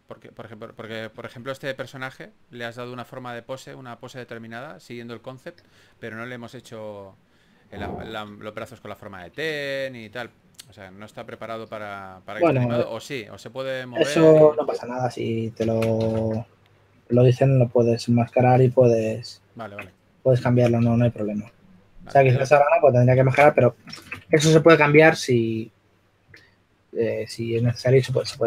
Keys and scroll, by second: 0.0-0.6 typing, 9.2 s, 11.7 w, 15.2 e, 16.3 q, 21.3 e, 22.5-23.3 typing, 23.4 super+z, 24.3 super+a, 25.1 typing, 28.3 shift+f.